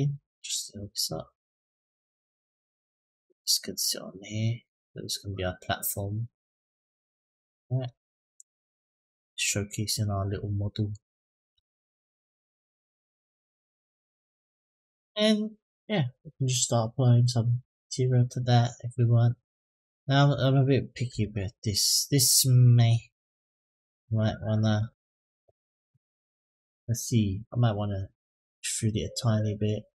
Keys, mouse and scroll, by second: 1.8-7.2 drag, 7.5 click, 7.9-8.3 middle drag, 8.6-9.2 scroll down 2, 9.2-10.7 middle drag, 10.9-11.3 shift+middle drag, 11.5-12.1 middle drag, 12.3-12.9 scroll up 3, 13.0 shift+middle click, 13.9-14.6 scroll down 1, 19.6 click, 20.9 KP_Decimal, 21.8-22.4 scroll down 2, 22.4-22.7 middle drag, 23.6 click, 26.3 click, 27.7-29.8 drag.